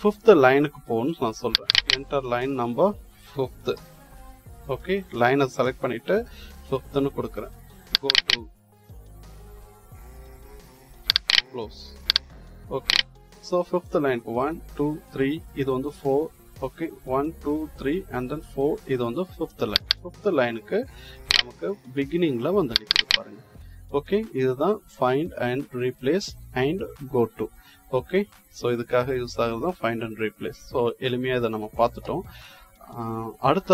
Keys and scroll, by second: 3.6 5.